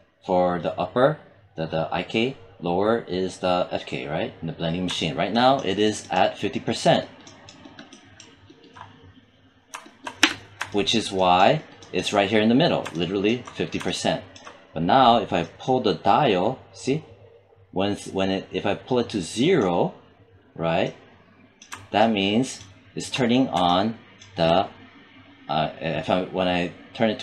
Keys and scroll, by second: 10.3 space.